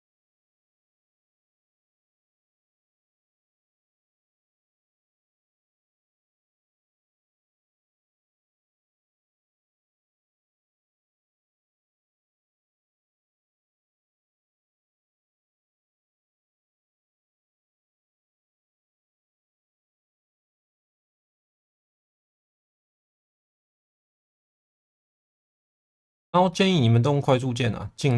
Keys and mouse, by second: 0.1 2, 1.5 shift+v, 2.6 click, 4.2 click, 4.8 shift+v, 5.7 ctrl+z, 6.7 ctrl+z, 7.8 1, 8.8 shift+v, 9.9 click, 10.6 click, 11.1 shift+v, 12.0 click, 12.6 click, 13.9 click, 14.6 middle click, 16.1 middle click, 16.7 shift+v, 18.4 shift+Tab, 19.2 shift+v, 20.2 click, 20.7 click, 20.9 shift+v, 21.4 click, 21.8 click, 23.4 click, 24.6 click, 24.9 middle click, 25.7 shift+middle click, 26.5 middle click, 27.3 click.